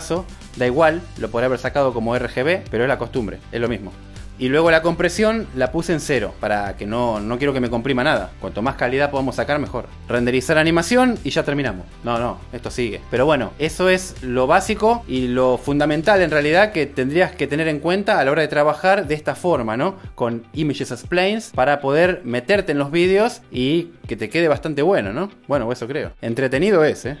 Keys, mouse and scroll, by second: 15.0 g, 22.4-27.2 drag.